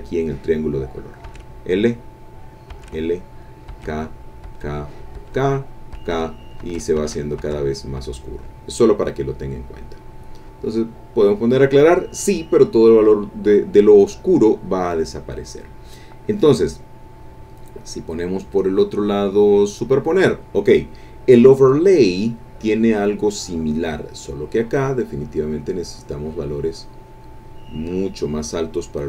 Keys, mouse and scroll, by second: 1.3 l, 2.7-6.6 typing, 9.5 click, 10.2 click, 14.8 click, 19.8 click, 23.9 click, 25.2-29.0 drag.